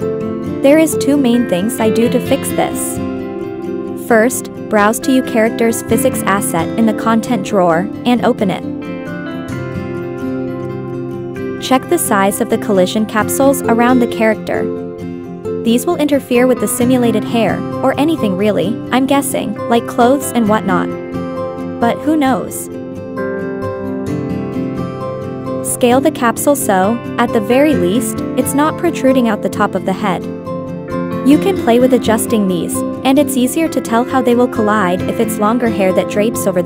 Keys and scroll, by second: 3.1 0, 3.6 Return, 28.4 Left, 28.7 Left, 28.8 Right, 28.9 Up, 29.1 Up, 29.5 Right, 29.6 Up, 30.0 Up, 30.2 Down, 33.3-33.8 Left, 33.9 Left, 33.9 Up, 34.2 Up.